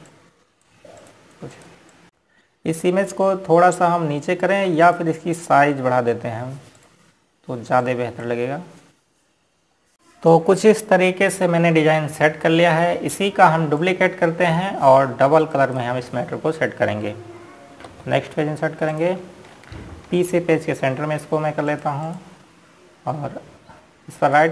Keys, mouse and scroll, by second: 2.4 ctrl+click, 4.3-4.7 scroll up 1, 6.5 ctrl+click, 10.8 ctrl+space, 11.1 click, 15.5 click, 17.2 right click, 19.6 Page_Down, 20.6 click, 22.2 p, 23.4 click.